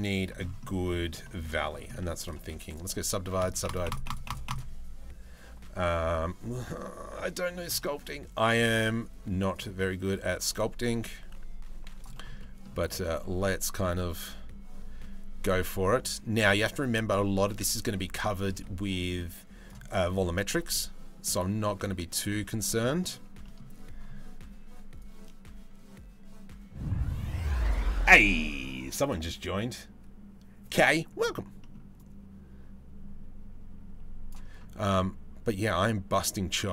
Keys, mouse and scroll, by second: 0.2 middle click, 0.8 shift+middle click, 1.1 middle click, 1.5 middle click, 2.0 click, 2.7 click, 3.4 click, 3.6 click, 3.8 click, 4.1 click, 6.2-7.5 drag, 9.1 click, 9.9-11.6 drag, 12.0 middle click, 12.5-17.8 drag, 18.7 click, 19.7-22.2 drag, 22.5 middle click, 23.0 middle click, 24.6-27.3 drag, 31.2 middle click, 31.6-33.9 drag, 34.4-36.7 drag.